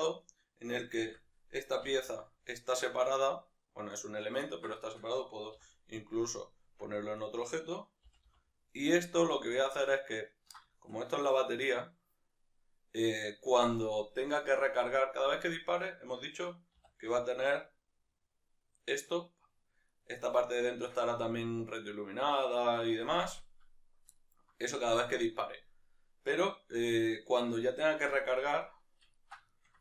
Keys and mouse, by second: 0.2 right click, 1.1 l, 4.1 right click, 4.5-7.2 ctrl+middle drag, 6.2 p, 7.2 right click, 8.1 g, 9.8-15.4 ctrl+middle drag, 15.4-16.8 right drag, 16.8 s, 20.0 right click, 24.2-27.2 ctrl+middle drag, 27.2-29.2 right drag, 29.2-29.8 ctrl+middle drag.